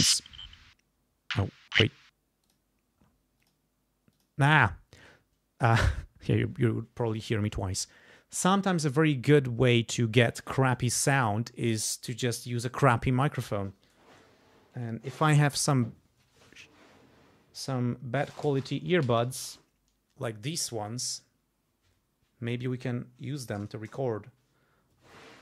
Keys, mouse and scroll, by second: 2.4 click, 3.4 click, 4.1 click.